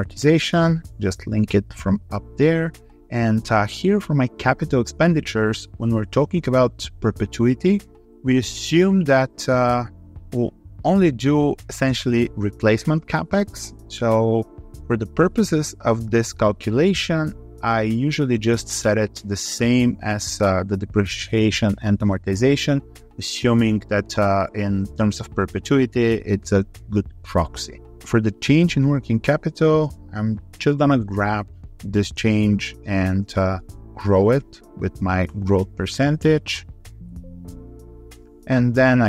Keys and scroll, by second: 0.9 ctrl+r, 33.7 ctrl+Left, 36.7 alt+2, 36.9 3.